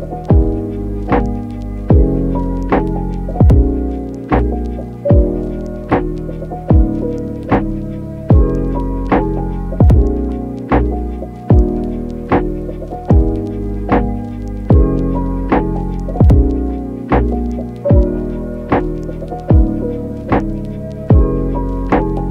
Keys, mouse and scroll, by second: 0.5 shift+middle click, 0.7 click, 0.9 click, 1.1 click, 1.9 click, 3.2 click, 5.7 click, 6.4 click, 7.5 click, 8.0 alt+q, 8.5 click, 9.0 click, 9.1 click, 10.0 click, 10.4 alt+q, 12.1 click, 12.8 click, 13.1 click, 15.4 click, 16.3 alt+q, 16.3 click, 16.6 click, 17.1 click, 17.6 click, 18.1 click, 18.6 click, 19.1 click, 19.7 click, 20.1 click, 20.2 click, 20.5 click, 20.7 click, 21.1 click, 21.9 click.